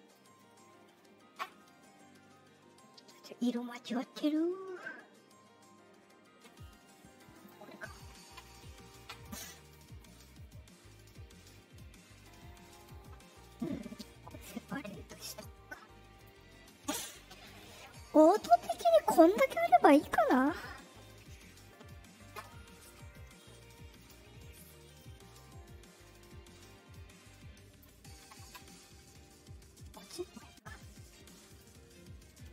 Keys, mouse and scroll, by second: 3.3 middle click, 4.1 click, 7.3 click, 8.2 Return, 12.7 right click, 14.3 click, 15.0 right click, 16.1 click, 23.2 middle click, 23.9 click, 24.9-27.7 drag, 30.5 middle click, 31.4 click, 32.4 click.